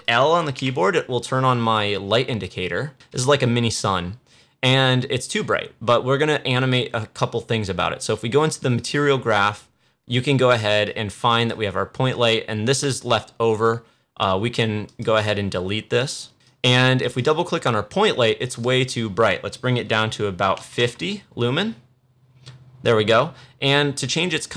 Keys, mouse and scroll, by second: 0.5 l, 8.7-14.8 drag, 15.1 right click, 15.9 click, 24.4-24.5 drag.